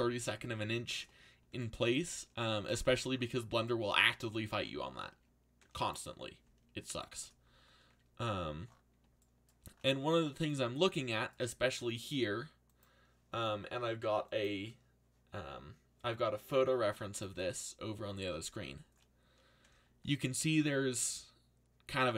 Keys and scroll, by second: 2.9 a.